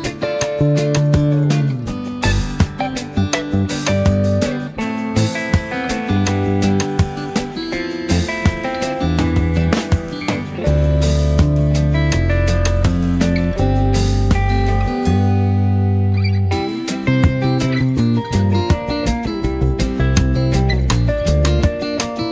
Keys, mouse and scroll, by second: 1.6 shift+Up, 4.9 click, 5.2 z, 5.5 click, 6.2 v, 6.6 click, 7.6-8.9 alt+shift+drag, 9.7 Down, 11.2 click, 11.3-14.7 typing, 11.6 click, 12.1 click, 12.6 click, 13.0 click, 13.4 click, 14.2 click, 15.4 click, 16.9-17.8 alt+click, 18.0 space, 18.8 space, 19.0-22.3 drag, 20.0-22.3 drag.